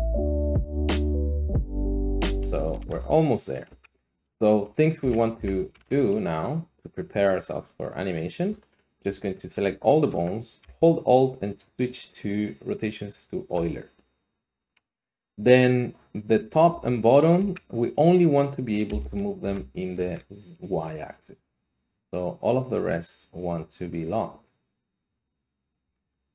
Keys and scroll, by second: 0.6 e, 0.9 Tab, 2.3 Tab, 2.3 Escape, 2.3 r, 2.9 r, 3.6 Escape, 5.0 a, 5.4 a, 5.7 a, 16.7 g, 17.4 Escape, 18.9 g, 19.4 z, 20.0 Escape.